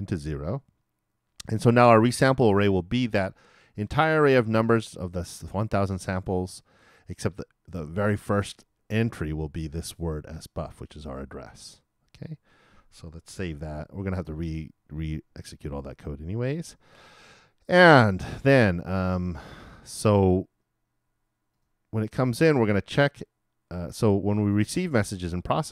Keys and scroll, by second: 13.5 super+s.